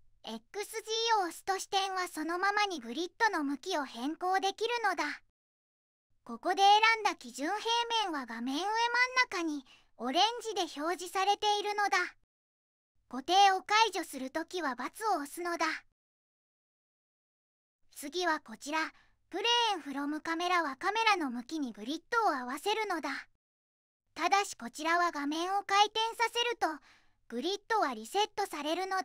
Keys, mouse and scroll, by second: 24.3 middle click, 25.0-25.3 middle drag.